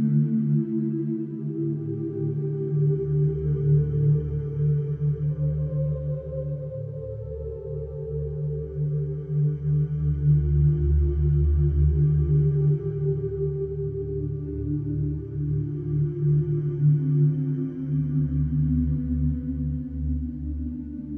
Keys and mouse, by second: 0.6 click, 1.6 KP_2, 1.8 KP_5, 2.0 Return, 4.1 0, 5.2-8.7 alt+drag, 9.4 ctrl+alt+0, 11.3 click, 13.7 -, 14.5 click, 15.2 click, 16.2 g, 17.5-18.5 drag, 18.5 F12.